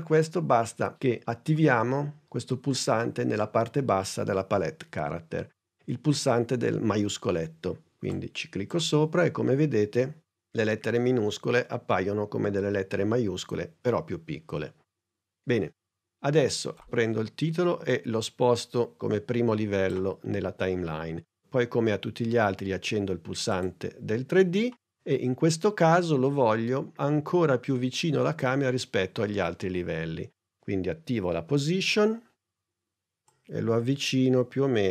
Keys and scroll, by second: 31.1 p.